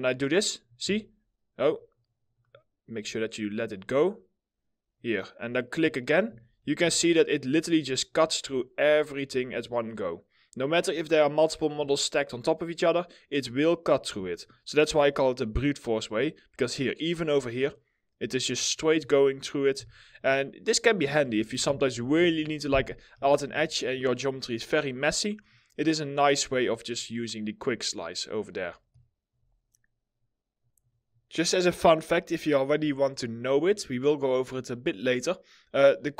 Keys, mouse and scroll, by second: 0.5 w, 5.7 middle click, 5.8-6.9 typing, 6.2 scroll, 6.2 scroll up 1, 7.2 double click, 7.8 middle click, 7.9 scroll down 1, 8.3 alt+middle click, 9.3 alt+middle click, 11.3 scroll, 11.3 scroll up 1, 11.7 alt+middle click, 14.4 alt+middle click, 15.9 alt+middle click, 15.9-17.3 scroll up 1, 17.3 double click, 19.7 scroll down 1, 20.1 alt+middle click, 21.0 middle click, 21.3 ctrl+z, 25.2 middle click, 32.5 alt+middle click.